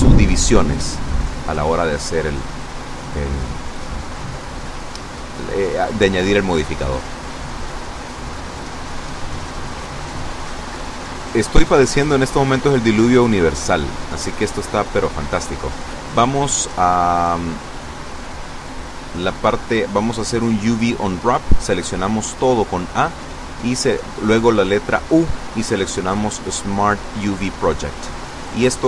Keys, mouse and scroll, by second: 9.4-11.2 drag, 13.1 click, 15.6 click, 18.4 Tab, 20.5 a, 22.4 u, 25.2 click, 26.3 click.